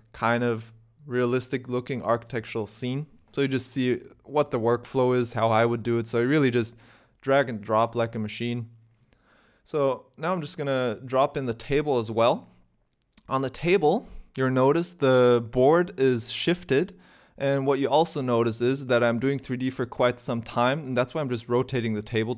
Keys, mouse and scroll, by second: 11.4 t.